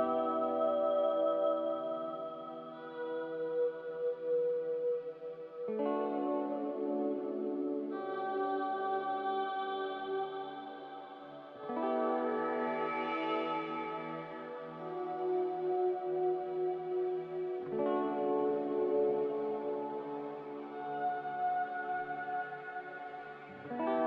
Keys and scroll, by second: 9.0-9.9 typing, 13.1 ctrl+z, 16.1 typing, 17.5 typing, 18.2 ctrl+z, 21.7 typing.